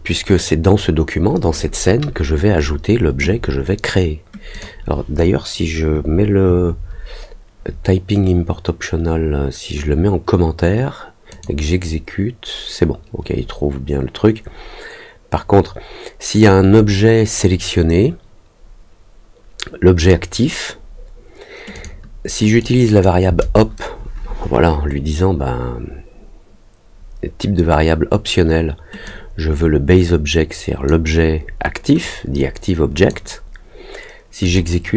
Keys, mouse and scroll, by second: 4.5 click, 11.2 click, 16.3-20.0 drag, 21.7 click, 22.5 click, 29.0-30.8 drag, 32.0-33.0 drag, 34.4 click.